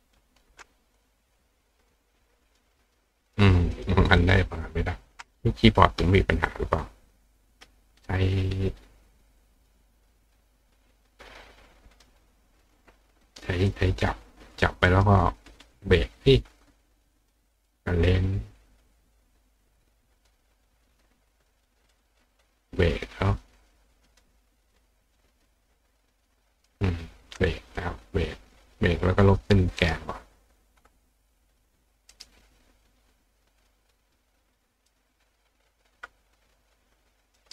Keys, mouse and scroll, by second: 1.0 click, 1.8 click, 2.5 click, 3.3 click, 3.7 click, 4.2 click, 9.3 click, 11.3 click, 11.9 click, 12.6 click, 13.3 click, 13.7 click, 14.4 click, 14.9 right click, 16.0 click, 17.5 click, 18.8 click, 19.6 click, 20.3 click, 21.9 click, 24.1 click, 24.5 click, 25.2 click, 26.3 click, 27.8 click, 28.5 click, 29.1 click, 29.8 right click, 30.5 click, 31.0 click, 31.7 click, 32.1 right click, 33.6 click, 34.8 click, 35.7 click, 37.4 right click.